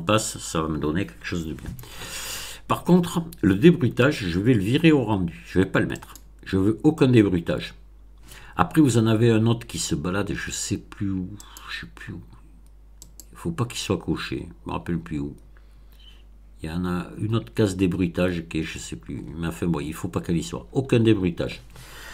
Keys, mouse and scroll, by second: 5.8 click, 8.7-9.1 scroll down 2, 9.2-9.6 scroll down 2, 11.3 click, 12.9 click, 13.9-14.3 scroll down 2, 14.6 scroll up 2, 14.7-15.0 scroll down 2, 16.0-16.3 scroll down 2, 16.8 scroll down 2, 17.6 scroll up 2, 17.7 scroll down 2, 18.5-20.0 scroll up 6, 20.4-20.8 scroll up 2, 20.8 middle click.